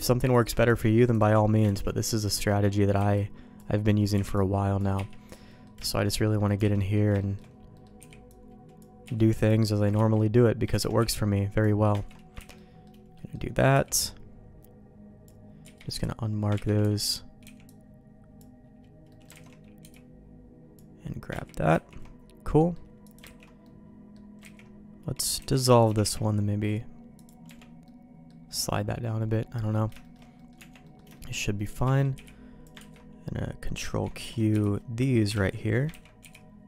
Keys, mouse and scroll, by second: 0.3 click, 0.6 click, 1.6 ctrl+x, 1.8 middle click, 2.9 b, 3.7 middle click, 4.1 b, 4.9 q, 5.4 middle click, 5.8 shift+middle click, 6.1 middle click, 6.7 alt+a, 6.7 middle click, 7.1 shift+middle click, 7.7 middle click, 9.0 b, 9.0 q, 9.9 ctrl+q, 10.7 ctrl+x, 10.9 b, 12.0 ctrl+q, 12.3 ctrl+x, 12.5 middle click, 13.1 middle click, 13.7 b, 15.6 q, 16.5 ctrl+q, 16.8 ctrl+x, 17.4 b, 19.0 middle click, 19.4 alt+a, 19.8 b, 21.3 ctrl+q, 21.7 ctrl+x, 22.5 middle click, 23.0 click, 23.2 ctrl+x, 23.6 middle click, 24.4 ctrl+z, 25.3 ctrl+x, 25.6 click, 25.8 g, 27.4 Tab, 27.8 middle click, 28.9 middle click, 29.7 middle click, 30.0 shift+middle click, 30.3 middle click, 30.5 Tab, 30.8 middle click, 31.1 shift+middle click, 31.5 middle click, 32.1 b, 32.7 ctrl+q, 34.0 ctrl+q, 34.2 alt+a, 34.5 b, 35.5 ctrl+q, 36.0 ctrl+x, 36.2 b.